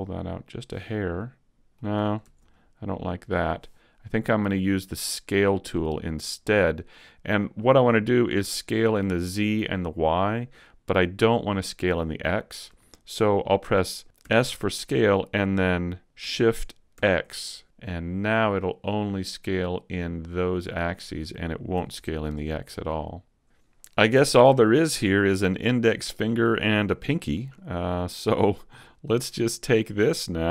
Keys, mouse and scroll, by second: 0.6 click, 0.8 middle click, 2.5 super+z, 2.5 middle click, 6.6 middle click, 12.2 middle click, 14.2 s, 21.1 click, 21.7 a, 22.0 Tab, 22.2 middle click, 23.7 Tab, 27.6 middle click, 28.8 right click, 29.2 middle click, 29.2-30.5 scroll up 1.